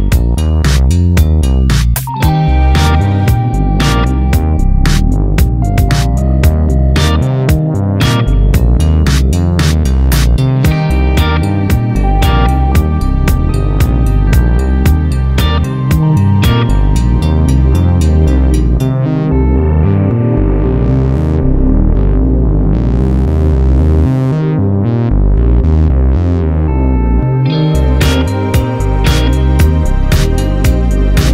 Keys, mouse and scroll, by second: 0.7 click, 1.1 Tab, 1.8 click, 2.1 Tab, 2.5 alt+a, 4.7 click, 5.4 g, 7.9 a, 8.6 scroll down 1, 9.3 scroll up 1, 9.8 click, 13.3 r, 13.7 right click, 14.0 r, 16.2 right click, 16.7 alt+a, 17.2 a, 17.5 scroll up 1, 17.9 scroll down 1, 18.3 scroll up 1, 20.5 g, 20.5 click, 20.8 g, 22.3 click, 23.2 click, 23.5 click, 23.9 g, 24.7 click, 24.9 g, 26.9 click, 27.3 r, 27.8 click, 28.3 g, 28.6 click, 29.3 s, 30.3 click.